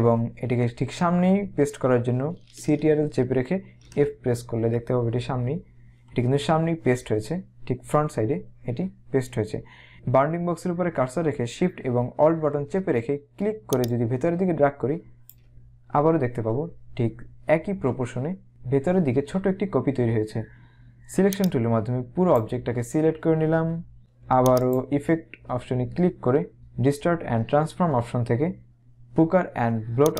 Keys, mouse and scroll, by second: 3.7 ctrl+f, 13.7 alt+shift+click, 21.4 click, 24.6 click.